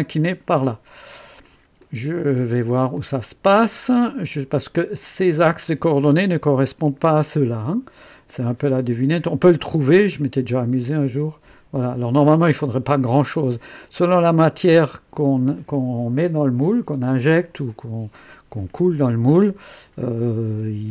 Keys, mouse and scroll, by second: 1.8 click, 2.2 typing, 3.0-3.8 drag, 8.5 click, 9.8-10.5 scroll down 2, 12.6 scroll up 2.